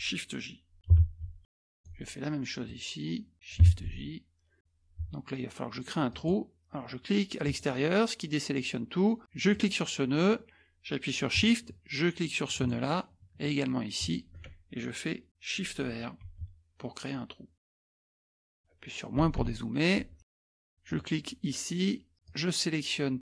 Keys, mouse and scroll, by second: 1.0 shift+j, 1.7 middle click, 1.7-2.1 scroll down 1, 2.7 click, 3.7 shift+j, 6.1 click, 7.4 click, 9.5 click, 12.5 shift+click, 14.0 shift+click, 16.3 shift+r, 17.6 click, 18.1 scroll up 2, 18.4 middle click, 18.4-19.2 scroll down 1, 19.2 KP_Subtract, 19.4 KP_Subtract, 20.3-20.7 scroll down 2, 20.9 click, 22.2-23.2 drag.